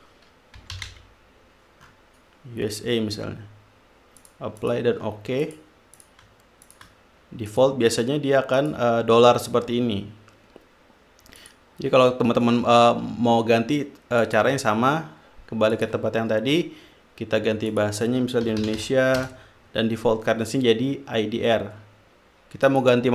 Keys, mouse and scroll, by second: 0.7-1.7 typing, 2.5 click, 4.5 click, 4.9-5.6 drag, 5.8 click, 6.3 click, 7.0 shift+click, 7.8 click, 8.9 click, 11.7 click, 14.6 click, 16.1 click, 18.0 click, 18.6-19.5 typing, 19.6 Return, 23.0 click.